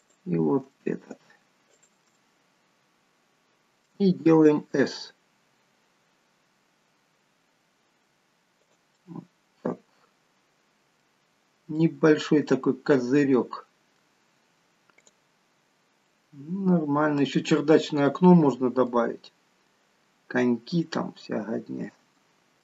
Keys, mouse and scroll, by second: 0.8 middle click, 1.8 shift+click, 2.2 middle click, 5.5 s, 9.1 middle click, 11.5-11.9 scroll down 3, 11.9 middle click, 15.1 click, 15.7 scroll down 1, 16.2 middle click, 19.6-21.0 scroll down 1, 21.0 middle click, 21.0 scroll down 1, 22.2 shift+middle click.